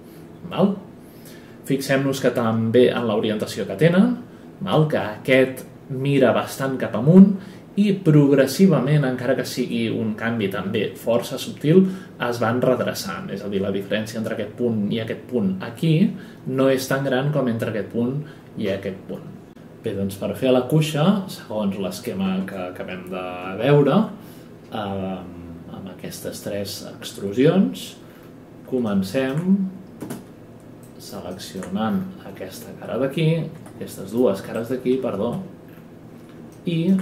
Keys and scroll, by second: 30.0 space, 33.5 F11.